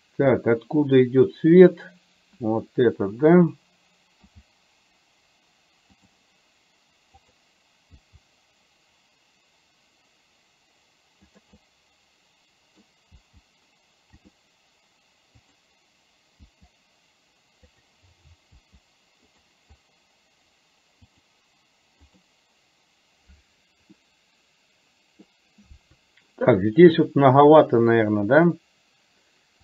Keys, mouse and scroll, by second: 1.7 click, 4.3 g, 7.3 click, 8.2 g, 11.7-13.3 middle drag, 13.3 g, 15.5 click, 16.5 g, 18.7 g, 22.2 click, 24.0-25.5 middle drag.